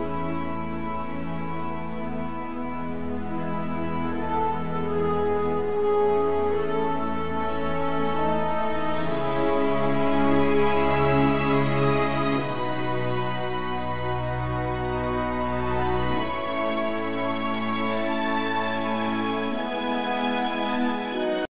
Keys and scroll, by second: 2.1 z, 7.7 shift+c, 14.1 KP_1, 16.4 t, 17.9 Tab.